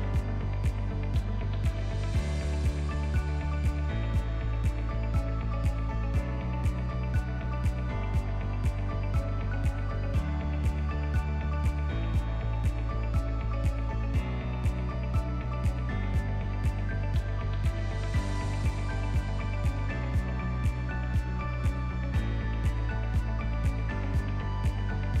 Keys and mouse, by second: 0.6 Tab, 1.3 alt+click, 2.1 2, 2.6 alt+click, 3.6 e, 8.7 e, 12.4 e, 14.1 e, 16.3 f, 16.8 ctrl+middle click, 17.3 middle click, 18.2 KP_1, 18.7 ctrl+middle click, 19.3 alt+z, 19.7 shift+middle click, 20.7 1, 20.9 alt+z, 21.3 click, 22.1 alt+z, 22.7 click, 23.7 shift+middle click, 24.7-25.2 drag.